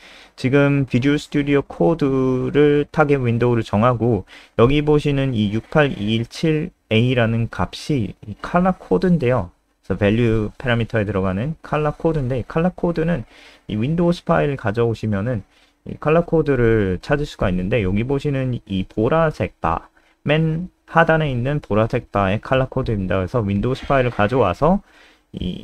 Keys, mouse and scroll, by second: 13.1-13.6 scroll down 1, 13.7 click, 19.5-21.1 typing, 21.1 click.